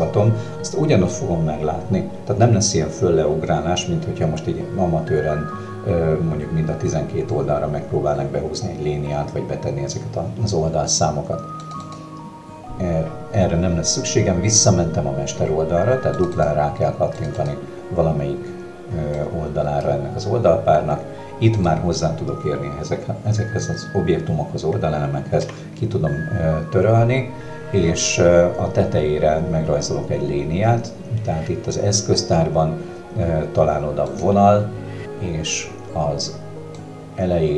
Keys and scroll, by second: 25.4 Delete.